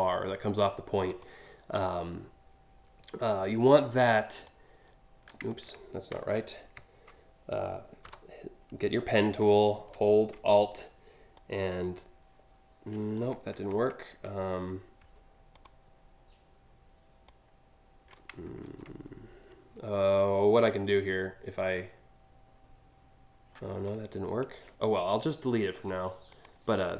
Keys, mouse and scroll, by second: 0.7 click, 4.0-5.1 alt+drag, 5.7 ctrl+z, 11.0-12.8 alt+drag, 13.2 ctrl+z, 15.2 alt+click, 16.9 alt+click, 18.2 ctrl+z, 21.2-23.5 drag, 24.0 ctrl+z, 24.8 right click, 25.9 click, 26.8 click.